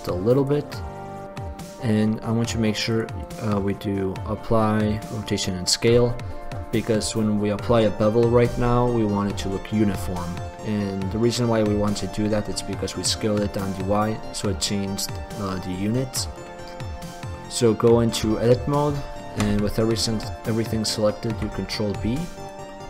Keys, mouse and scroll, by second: 0.7-2.5 drag, 12.5-14.5 drag, 16.2-18.4 drag, 18.4 Tab, 21.5 ctrl+b, 22.7 click.